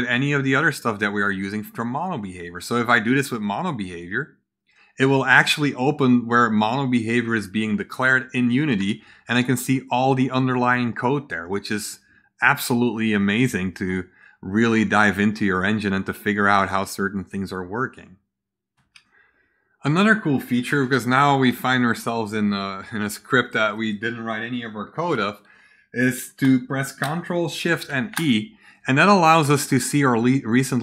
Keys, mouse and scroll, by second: 3.3 ctrl+click, 8.9-9.3 scroll down 2, 9.4 scroll down 2, 10.0 scroll down 2, 10.6 scroll down 2, 11.1 scroll down 2, 11.8 scroll down 2, 12.8-13.9 scroll down 8, 15.5 scroll down 2, 16.1 scroll down 2, 16.4-16.9 scroll up 4, 27.8 ctrl+shift+e.